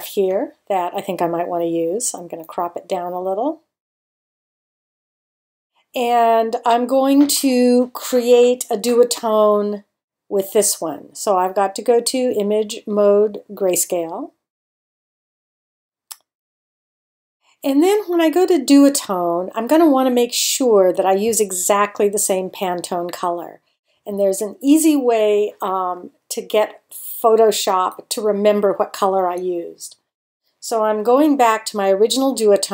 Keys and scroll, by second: 4.8 Return.